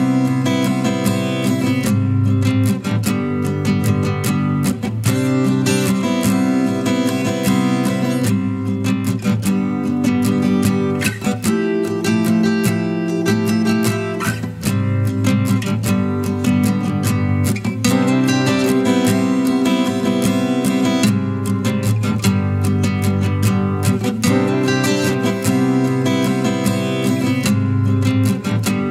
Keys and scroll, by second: 2.3 ctrl+t.